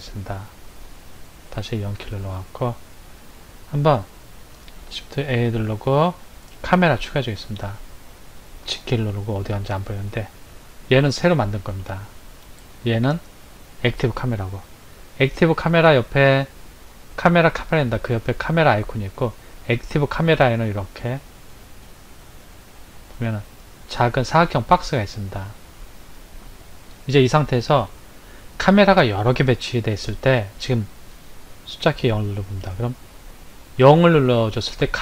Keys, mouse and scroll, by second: 1.8 KP_0, 3.1 click, 5.1 shift+a, 8.7 g, 11.6 click, 13.1 click, 22.6 click, 26.0 Left, 32.2 KP_0.